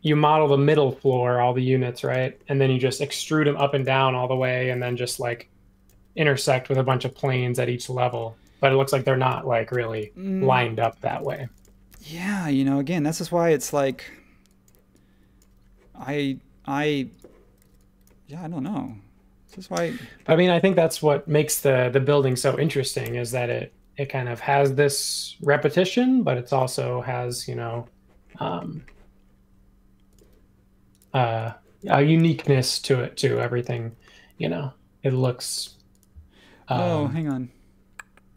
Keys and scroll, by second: 0.0 m, 2.1 space, 3.6 space, 5.0 p, 6.7 typing, 8.1 space, 9.3 l, 10.8 space, 11.9 p, 13.7 typing, 17.7 e, 20.0 space, 23.0 BackSpace, 27.3 super+1, 33.6 space.